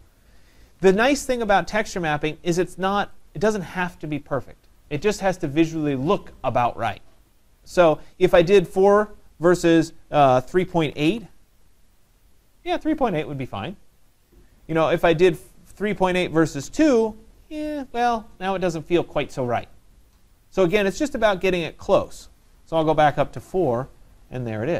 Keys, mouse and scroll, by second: 1.8 click, 3.2 click, 10.5-11.5 typing, 15.4 click, 16.3-17.0 typing, 16.8-20.5 drag, 22.2-24.0 drag, 22.9-23.4 typing.